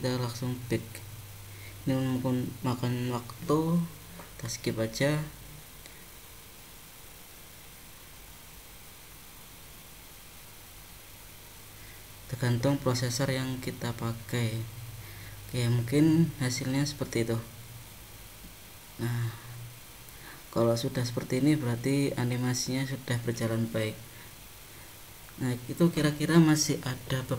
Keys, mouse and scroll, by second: 0.7 click, 15.0 click, 15.8 click, 17.7 click.